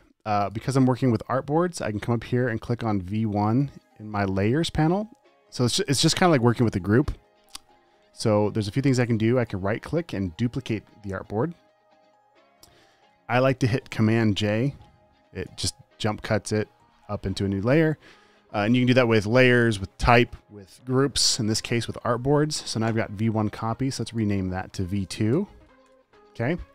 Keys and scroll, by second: 15.7 super+j, 25.6 v, 26.1 v, 26.2 Return.